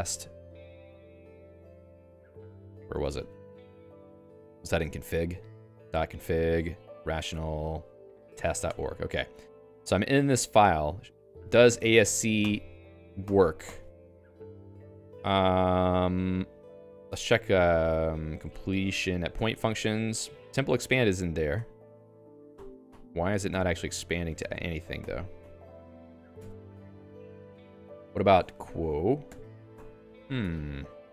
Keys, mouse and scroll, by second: 0.0-2.0 typing, 2.9 ctrl+g, 4.7 ctrl+f, 5.2 alt+h, 5.6-8.3 typing, 7.9 Tab, 8.6 Return, 9.4-12.2 typing, 12.4 ctrl+alt+i, 13.2 ctrl+alt+i, 13.6 ctrl+alt+i, 14.0 ctrl+g, 14.8 a, 17.1 Escape, 18.1-22.1 typing, 22.5 ctrl+alt+i, 22.9 ctrl+alt+i, 23.5 ctrl+alt+i, 23.9 Escape, 24.3 a, 24.4 BackSpace, 24.6 BackSpace, 25.0 ctrl+alt+i, 25.4 ctrl+alt+i, 26.3 Escape, 26.5-29.2 typing, 29.7 ctrl+alt+i, 30.4 Escape.